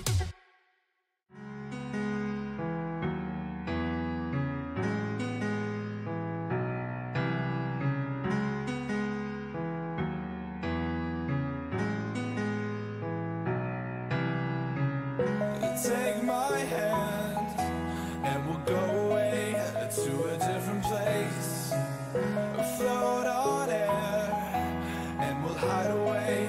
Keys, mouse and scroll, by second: 0.9 ctrl+r, 2.2 a, 3.3 b, 4.9 g, 7.8 a, 9.1 b, 10.6 g, 12.5 a, 13.0 middle click, 14.8 middle click, 15.1 middle click, 17.1 ctrl+r, 18.5 a, 20.7 b, 24.0 b, 25.9-26.4 drag.